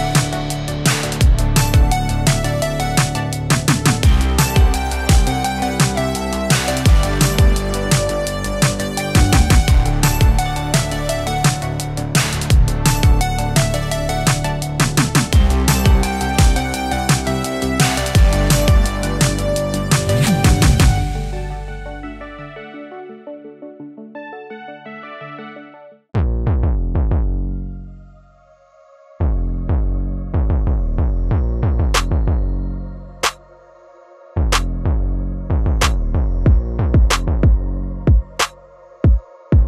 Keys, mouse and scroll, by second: 5.4 click, 7.7 right click, 9.3-10.0 drag, 32.2-35.7 drag, 37.4-38.4 typing.